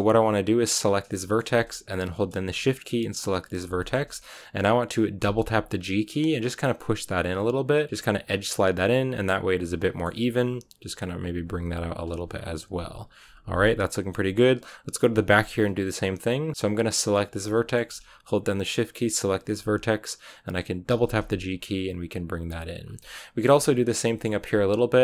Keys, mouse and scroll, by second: 0.8 right click, 1.0-3.3 shift+middle drag, 3.3 shift+right click, 3.7 shift+middle click, 4.6-5.1 scroll up 1, 5.1 g, 8.2 scroll down 1, 8.4-10.1 middle drag, 10.1 g, 11.1 r, 11.5 g, 12.5 KP_1, 13.5 middle click, 14.0 scroll down 2, 14.2-15.2 middle drag, 15.2-16.5 scroll up 1, 16.5-17.1 scroll up 1, 17.1 right click, 17.4-19.1 shift+middle drag, 19.1 shift+right click, 19.3-19.8 scroll up 1, 19.8-20.8 scroll down 1, 20.8 g, 23.0 shift+middle click, 23.8 scroll down 2, 23.9 middle click, 24.2-25.0 scroll up 1.